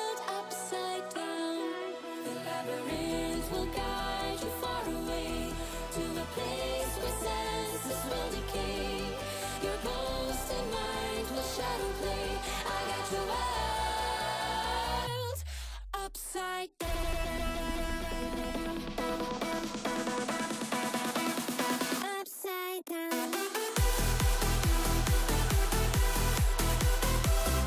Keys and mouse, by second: 0.9 click, 2.1-3.9 drag, 4.2 middle drag, 4.8-5.3 middle drag, 6.2 ctrl+shift+click, 6.9 ctrl+shift+click, 7.1 middle click, 8.9 middle click, 9.3-11.2 drag, 12.2 click, 15.7 middle click, 16.5-19.0 shift+drag, 19.6 middle click, 20.4 ctrl+shift+click, 21.0-22.6 middle drag, 22.9 middle click, 23.4 shift+drag, 23.9 middle click, 25.5 middle click, 26.5 middle drag, 27.1 drag.